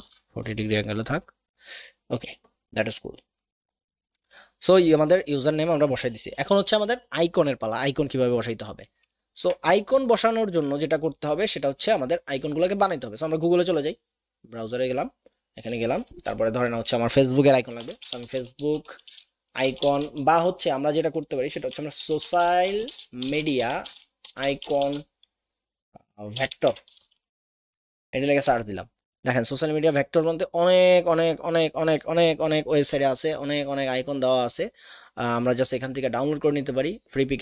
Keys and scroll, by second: 0.0 Return, 17.8-20.0 typing, 21.5-24.4 typing, 26.3-27.6 typing.